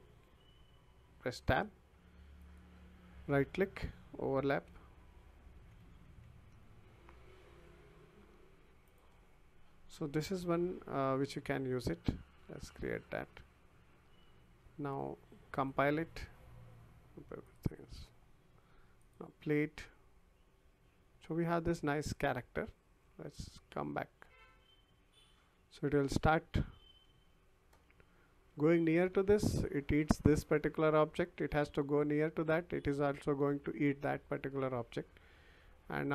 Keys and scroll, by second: 1.4 Tab, 4.5-6.5 typing, 21.3 w, 25.5 w, 28.5 w, 30.6 w, 35.5 w.